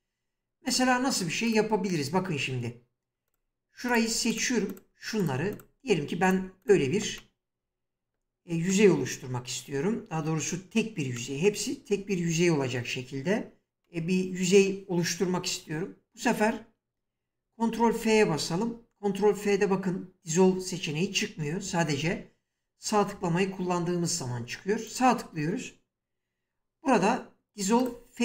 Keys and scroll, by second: 17.8 ctrl+f.